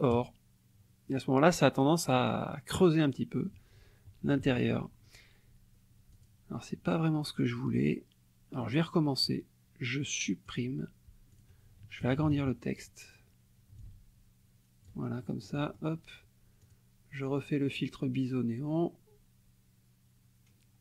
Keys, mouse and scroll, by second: 0.3 click, 2.2 click, 2.7 middle click, 4.2 KP_Subtract, 6.1 click, 8.5 right click, 10.4 click, 11.3 click, 12.0 KP_Subtract, 13.8-15.0 ctrl+shift+right drag, 15.2 ctrl+shift+right click, 16.6 click.